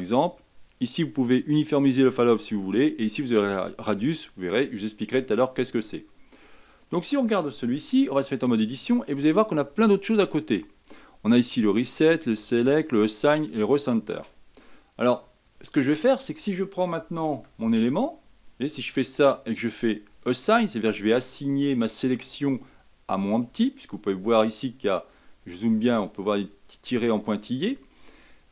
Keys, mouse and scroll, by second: 8.4 Tab, 17.3 Tab, 18.3 Tab, 20.1-23.4 drag, 23.4 Tab, 24.9-27.3 scroll up 5, 27.3-28.5 scroll down 5.